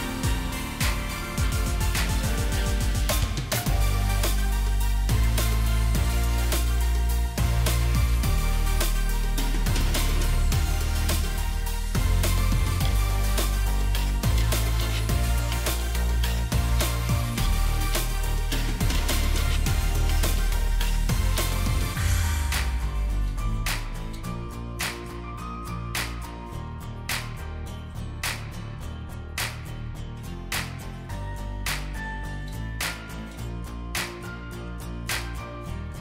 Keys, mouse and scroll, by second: 0.2 alt+shift+click, 8.5-11.5 scroll up 1, 35.2 alt+scroll up 1.